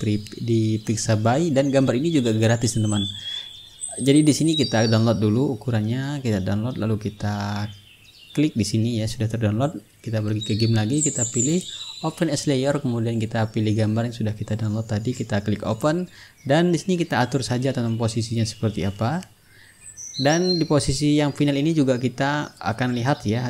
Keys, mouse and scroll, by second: 1.0 click, 3.8 click, 4.9 click, 6.0 click, 8.8 click, 10.3 click, 13.0 click, 15.0 click, 16.1 click, 17.6-18.9 drag, 18.7 shift+s, 19.3-22.1 ctrl+drag, 22.7 click.